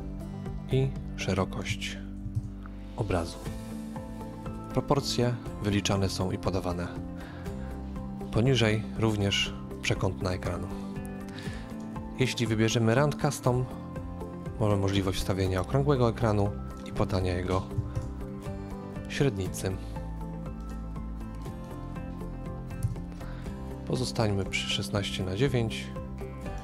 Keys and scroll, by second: 2.1 KP_4, 2.3 Return, 17.7 typing, 17.9 Return, 19.2 typing, 22.7 typing, 22.8 Return.